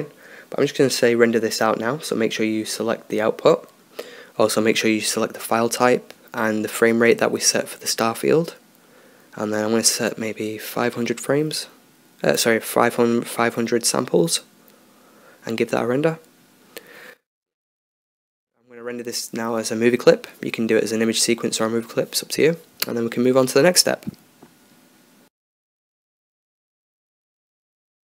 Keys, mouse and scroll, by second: 11.8 0.